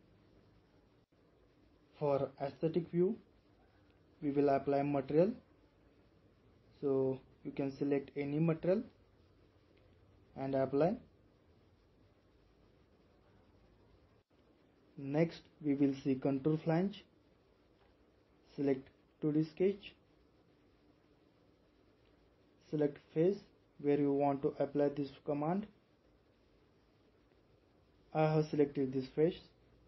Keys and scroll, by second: 7.1 s.